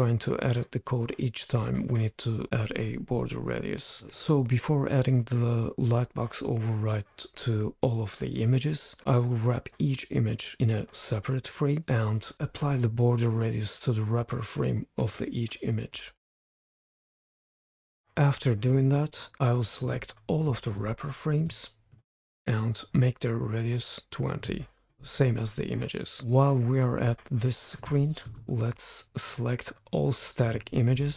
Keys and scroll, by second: 16.5 super+Return, 17.0 super+Return, 17.4 super+Return, 17.8 super+Return, 24.7-26.8 typing.